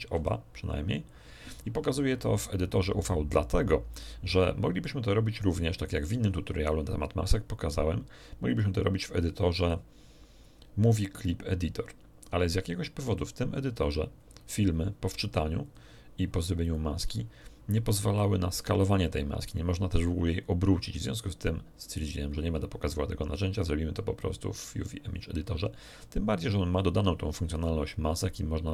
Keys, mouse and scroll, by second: 0.1 shift+r, 1.6 Escape, 3.3-4.0 scroll down 3, 4.8-6.0 middle drag, 8.5 click, 13.0 click, 14.1-14.5 scroll up 2, 15.6 click, 16.6 click, 23.5 click, 24.8 click.